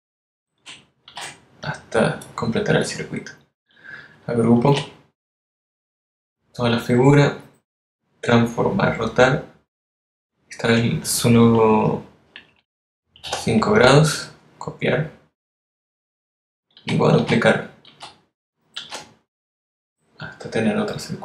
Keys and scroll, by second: 1.9 super+d, 5.5 super+g, 14.1 5, 17.6 super+d.